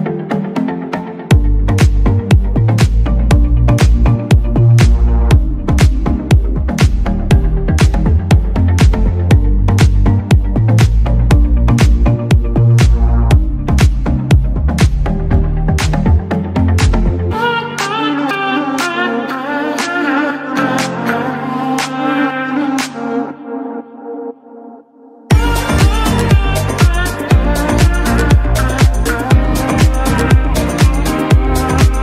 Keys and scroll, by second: 19.1 Escape, 20.9 ctrl+x, 22.6 ctrl+x.